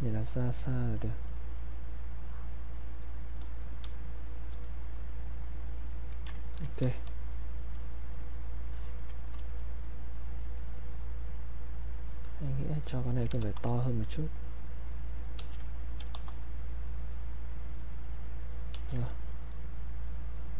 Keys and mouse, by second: 3.9 space, 4.3 click, 4.4 space, 4.6 click, 6.7 ctrl+right click, 6.8 click, 7.8 click, 9.3 click, 12.2 alt+click, 13.1 alt+click, 13.4 r, 14.1-15.4 drag, 15.4 q, 15.9 alt+click, 16.1 r, 16.7-18.7 drag, 18.7 q, 19.1 alt+click, 20.2-20.5 drag.